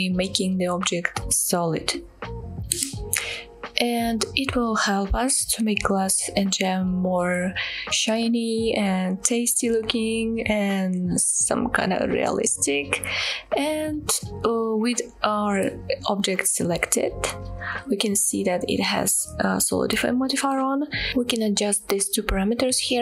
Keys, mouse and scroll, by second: 13.7 middle drag, 17.5-18.0 middle drag.